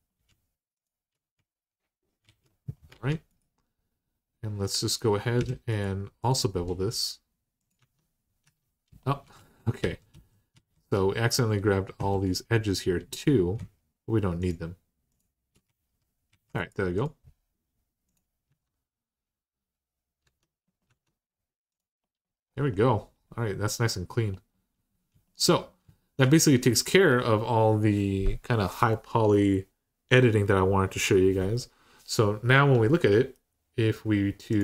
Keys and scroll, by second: 2.0 alt+z, 2.7 alt+z, 5.2 2, 7.6 Tab, 8.2 Tab, 9.1 ctrl+z, 9.6 ctrl+z, 9.9 ctrl+z, 10.3 ctrl+z, 11.8 2, 15.4 alt+z, 16.1 alt+z, 18.3 Tab, 20.0 Tab, 20.7 Tab.